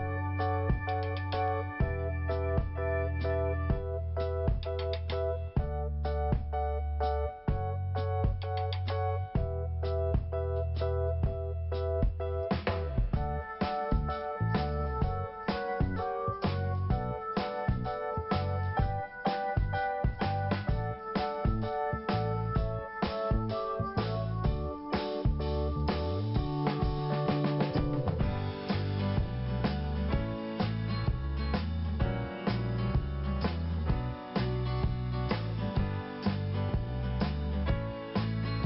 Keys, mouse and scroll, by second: 7.3 click, 10.3-10.8 scroll up 1, 11.4 click, 12.8-13.2 scroll down 2, 12.9 click, 14.4 click, 14.9-15.4 scroll up 1, 18.0 click, 27.5 click, 31.2 click, 34.8 scroll up 1, 35.5-35.9 scroll up 1, 37.9-38.6 scroll up 1.